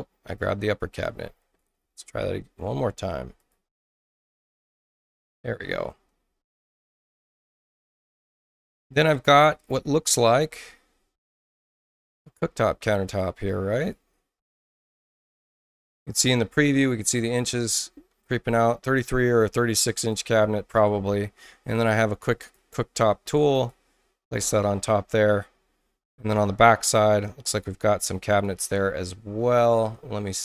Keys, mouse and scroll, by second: 1.6 ctrl+z, 2.7 ctrl+z, 3.3 click, 3.9 ctrl+alt+c, 5.0 click, 6.4 Tab, 13.0 click, 13.7 click, 15.0-17.4 drag, 19.3 click, 22.3 click, 23.5 click, 28.2 click, 29.4-30.4 scroll up 6.